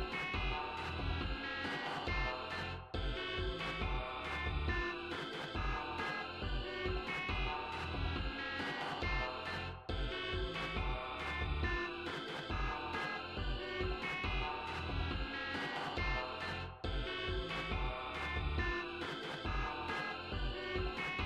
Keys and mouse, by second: 3.2 click, 4.2 click, 8.6 click, 9.0 click, 9.5 click, 10.8 click, 12.8 click.